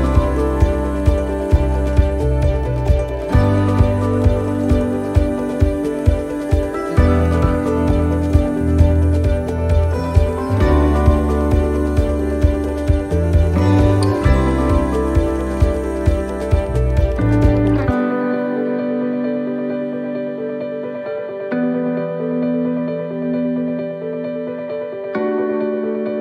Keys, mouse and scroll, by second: 0.2 middle click, 0.7 shift+middle click, 1.2 middle click, 1.5 scroll down 1, 2.0 shift+middle click, 3.4 shift+middle click, 3.7 scroll up 3, 4.1 shift+middle click, 5.6 right click, 7.0 click, 7.8 c, 20.8 x, 20.8 c.